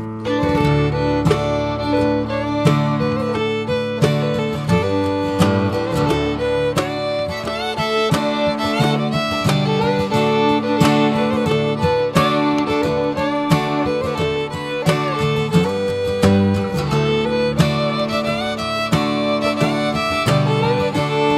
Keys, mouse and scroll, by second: 0.0 click, 1.2 click, 2.5 r, 6.5 click, 7.3 click, 10.0 s, 13.8 click, 14.8 r, 16.5 click, 17.8 r, 20.3 Tab, 20.6 click, 20.9 scroll down 1.